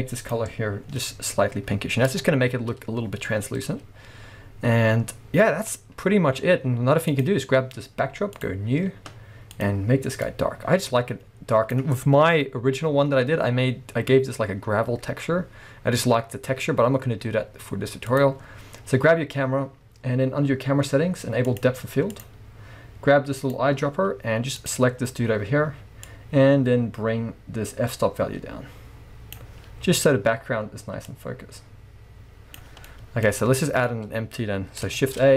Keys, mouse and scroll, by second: 2.2 a, 4.4 scroll up 2, 5.5 scroll up 1, 5.7-6.0 scroll down 2, 6.4 scroll up 1, 7.2 click, 8.4-9.7 drag, 12.7-13.2 scroll down 1, 13.2 scroll up 1, 16.0-16.8 scroll down 1, 18.1 click, 21.5 click, 22.1-23.6 drag, 26.1-33.0 drag, 29.9-31.1 scroll up 1, 33.0-35.3 middle drag, 33.2-33.6 scroll down 1, 33.8 scroll up 1, 35.0 shift+a.